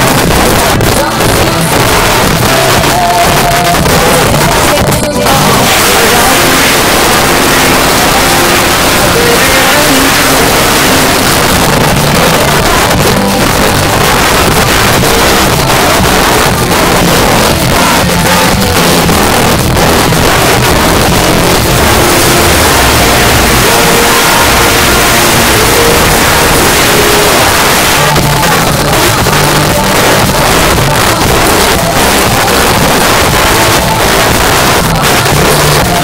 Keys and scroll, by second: 11.2 Page_Down, 27.5 Page_Down.